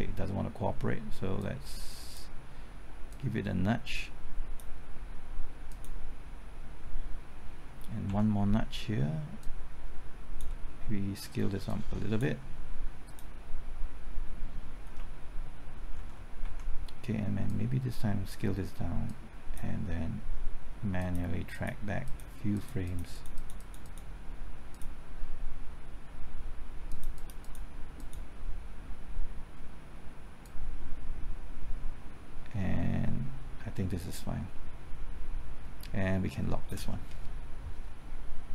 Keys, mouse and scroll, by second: 1.4-4.7 drag, 6.5 click, 7.7-8.1 scroll up 1, 8.1 Right, 8.1 typing, 9.4-12.7 drag, 15.0-16.4 typing, 17.5-38.5 drag.